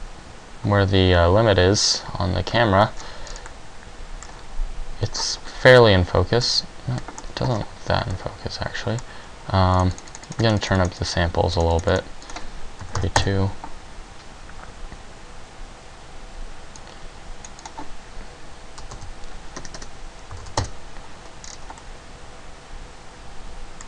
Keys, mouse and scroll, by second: 11.8 click, 13.3 click, 19.3 click.